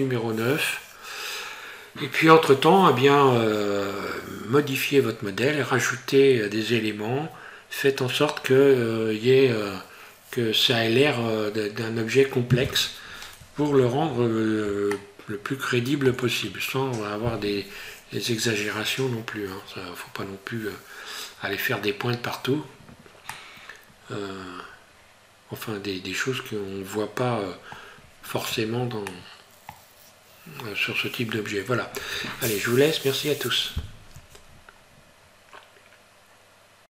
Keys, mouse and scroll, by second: 14.9 shift+middle click, 23.4 middle click, 29.1 middle click.